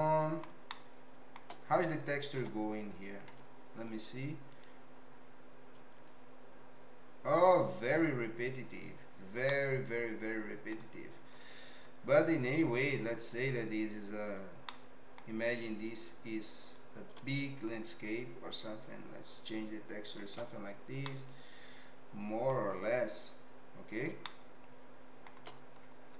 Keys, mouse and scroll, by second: 0.7 shift+middle click, 2.4 Tab, 3.3 z, 9.6-10.7 middle drag, 14.8 middle click, 16.9-20.2 shift+drag, 21.1-22.5 middle drag, 24.4 shift+middle click.